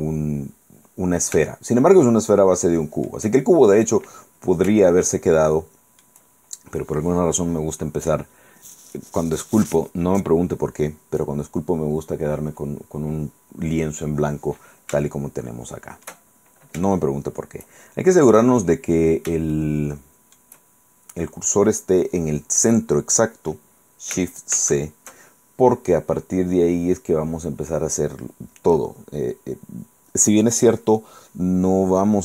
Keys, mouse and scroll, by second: 1.6-3.4 shift+middle drag, 5.0-6.3 shift+middle drag, 15.2-16.4 shift+middle drag, 18.6 scroll up 2, 19.6 shift+middle click, 20.5 shift+scroll up 2, 24.6 shift+c.